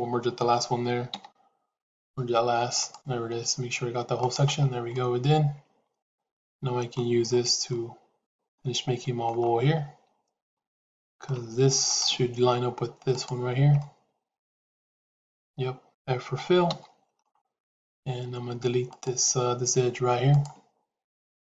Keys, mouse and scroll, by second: 1.1 m, 3.2 g, 4.8-6.9 middle drag, 7.6 middle click, 8.5 middle click, 10.3 shift+middle click, 11.7 click, 12.9 shift+click, 13.7-15.9 middle drag, 16.7 f, 17.2 middle click, 18.7 click, 20.2-21.4 drag.